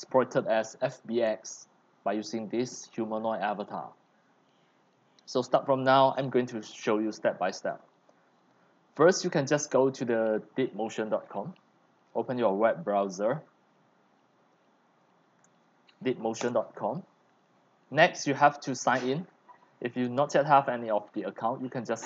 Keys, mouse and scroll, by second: 7.7 click, 8.2 right click, 9.6 click, 11.2-12.2 drag, 12.2 ctrl+c, 13.3-15.5 drag, 15.5 ctrl+v, 16.4 Return.